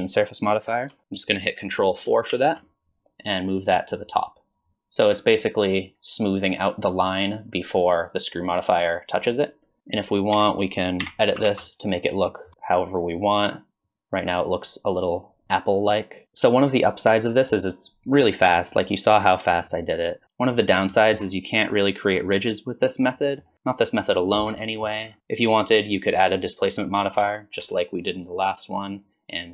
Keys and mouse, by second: 1.0 ctrl+z, 2.3 ctrl+4, 3.8 click, 5.7 click, 10.1 Tab, 10.5 KP_1, 10.7 alt+z, 11.2 shift+middle click, 11.6 click, 12.3 s, 13.2 click, 14.2 click, 15.6 click, 18.6 middle drag, 19.7 middle click, 20.6 middle drag, 21.0 shift+middle drag, 23.2 drag, 25.2-26.5 drag, 29.0-29.5 drag.